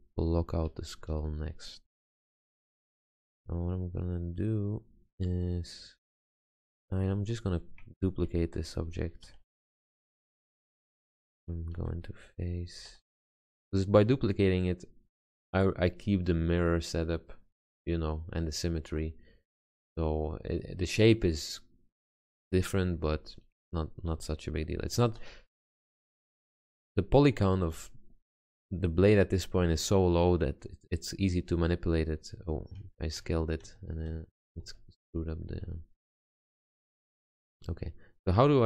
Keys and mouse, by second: 1.3 a, 4.1-5.0 middle drag, 6.6-8.4 middle drag, 9.4 shift+d, 11.0 Tab, 12.0 a, 13.1 g, 24.3 s, 25.4 g, 26.6 s, 27.8 r, 28.5 g, 33.4 ctrl+z, 33.8 ctrl+z, 34.3 ctrl+z, 34.8 ctrl+z, 35.2 ctrl+z, 35.7 ctrl+z.